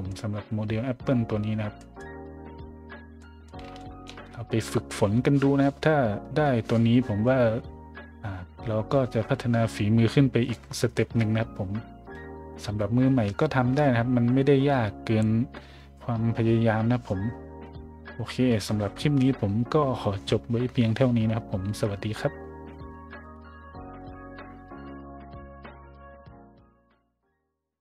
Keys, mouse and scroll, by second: 1.7 middle drag, 2.6 middle click, 3.2 middle drag, 3.8 shift+middle click.